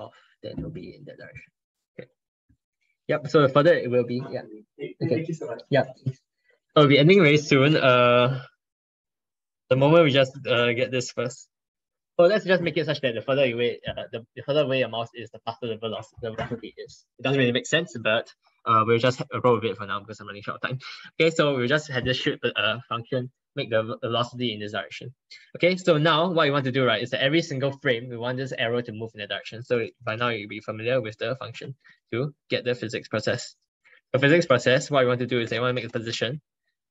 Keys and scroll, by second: 9.0 ctrl+BackSpace, 9.7 ctrl+Right, 9.9 ctrl+Right, 10.0 ctrl+Right.